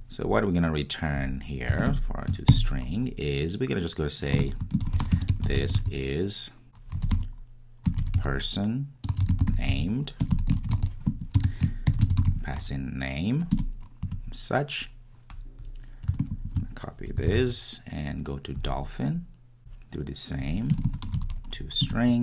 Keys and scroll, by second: 13.6 Return, 17.3 super+c, 22.0 Return.